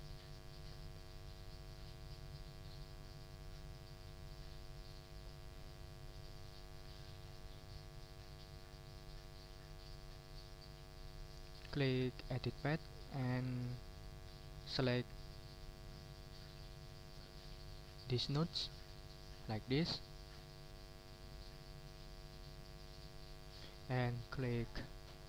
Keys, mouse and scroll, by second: 0.5 ctrl+click, 1.0 ctrl+click, 1.8 ctrl+scroll up 2, 3.8 ctrl+scroll down 2, 4.5 ctrl+click, 7.0 click, 12.6 click, 14.6-18.8 drag, 20.0 click.